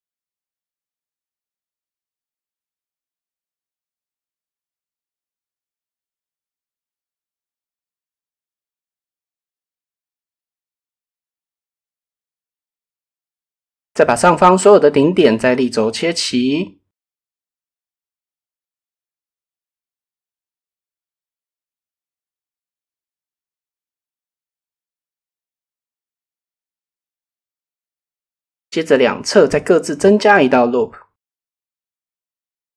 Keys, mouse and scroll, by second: 1.2 KP_7, 3.1 g, 3.3 g, 3.9 click, 4.8 middle click, 5.4 click, 6.4 click, 7.0 KP_7, 7.9 g, 8.1 g, 8.6 middle click, 9.8 middle click, 10.6 middle click, 11.1 middle click, 11.8 middle click, 12.6 KP_7, 13.8 KP_1, 15.3 click, 15.9 shift+middle click, 16.2-18.0 drag, 20.1 z, 20.3 KP_0, 20.6 KP_Enter, 22.9 KP_7, 25.3 shift+middle click, 26.0-27.2 middle drag, 28.3 ctrl+r, 29.9 middle click, 31.0 ctrl+r, 32.3 click.